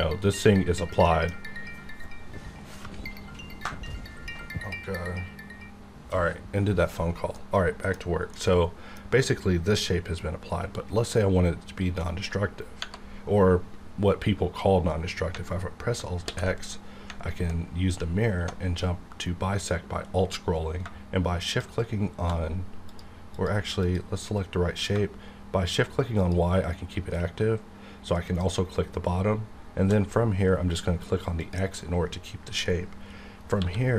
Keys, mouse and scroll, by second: 0.2 right click, 1.0 middle click, 7.4 middle click, 8.4 middle click, 9.2 scroll up 1, 16.2 alt+x, 17.6-17.9 alt+scroll down 1, 21.3 shift+Num_Lock, 21.3 alt+scroll down 1, 21.5 shift+click, 22.8 click, 33.6 q.